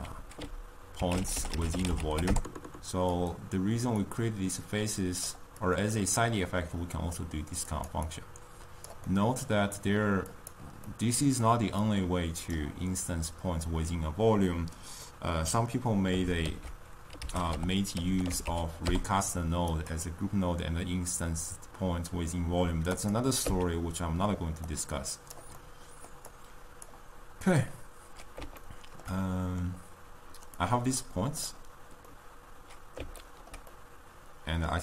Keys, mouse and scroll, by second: 5.3-23.4 drag, 23.4 x, 31.4-32.2 drag, 32.2-34.8 middle drag.